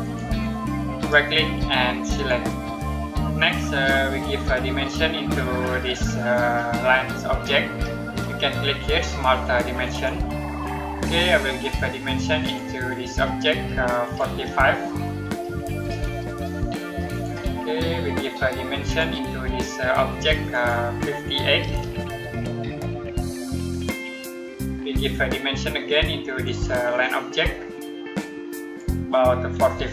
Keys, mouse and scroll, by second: 0.8 right click, 2.0 click, 9.7 click, 15.5 typing, 17.0 click, 21.5-22.1 typing, 23.6 click, 26.3 click, 29.6 typing.